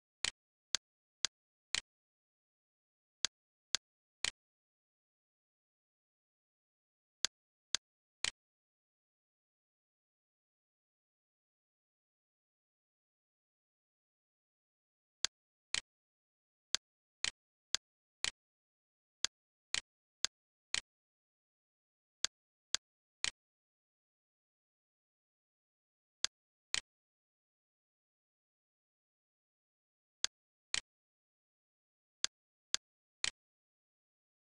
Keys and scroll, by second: 2.6 d, 5.3-6.7 typing, 8.9 ., 9.3 5, 10.2 Return, 14.0 l, 17.3 Escape, 18.2 r, 21.6 d, 23.7-24.7 typing, 24.8 Return, 27.7 ., 28.1 5, 28.5 Return, 33.0 1, 33.6 Return.